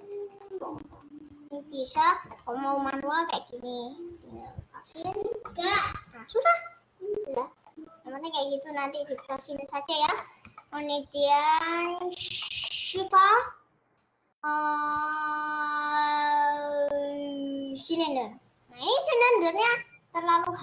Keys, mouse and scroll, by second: 0.1 click, 1.3 click, 2.1-5.1 middle drag, 5.1 click, 5.6-10.7 middle drag, 10.7-11.3 scroll up 2, 11.3 scroll down 2, 11.9-17.9 middle drag, 18.8 scroll down 3, 18.9-20.6 middle drag.